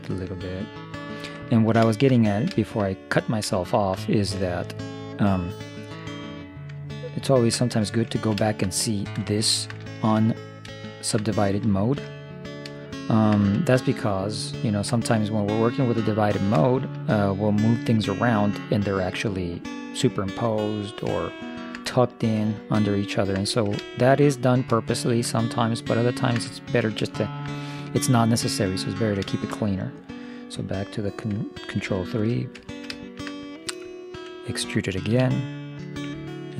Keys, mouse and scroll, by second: 1.6-5.8 middle drag, 7.2 ctrl+0, 8.2-11.1 middle drag, 12.9-15.7 middle drag, 16.3-18.4 middle drag, 20.4-23.2 middle drag, 25.5-28.9 middle drag, 28.4-30.2 right drag, 29.1-30.3 drag, 32.2 ctrl+3, 32.8 middle click, 35.1 e.